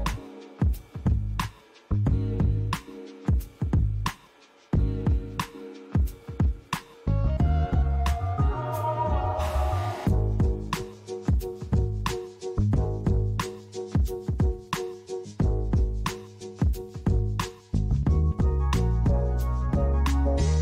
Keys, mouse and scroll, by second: 0.8 click, 1.5-2.4 scroll down 3, 3.6 click, 4.3 click, 5.7 click, 9.2 click, 11.1 click, 15.3-17.4 scroll down 6, 17.4-18.5 scroll down 2, 18.5-20.3 scroll down 4.